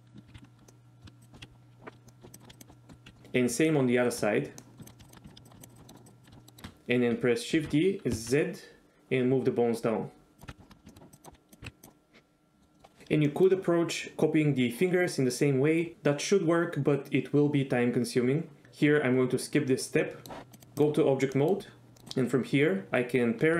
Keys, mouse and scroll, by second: 0.3 ctrl+z, 0.3 ctrl+z, 0.7 middle click, 1.2 shift+click, 1.4 KP_1, 2.1 middle click, 2.4 shift+click, 2.5 shift+click, 2.7 middle click, 3.1 KP_1, 3.8 shift+middle click, 4.7 middle click, 4.8 shift+click, 4.9 middle click, 5.1 shift+click, 5.3 ctrl+click, 5.5 shift+click, 5.6 shift+click, 5.8 middle click, 6.4 middle click, 7.7 shift+d, 8.3 z, 10.4 click, 10.5 KP_1, 10.6 shift+middle click, 10.9 shift+middle click, 11.2 click, 11.3 s, 11.6 g, 11.9 middle click, 12.7 middle click, 13.0 middle click, 13.5 shift+middle click, 20.2 middle click, 20.5 click, 20.6 click, 21.5 middle click, 22.0 middle drag.